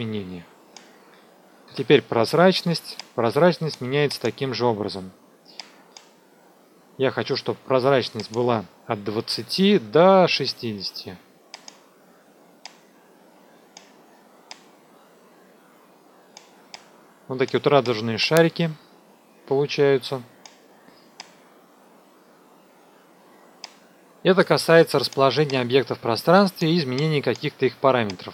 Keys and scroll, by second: 1.6 t, 9.2 KP_2, 9.4 KP_0, 9.6 Tab, 10.2 KP_6, 23.2 F2.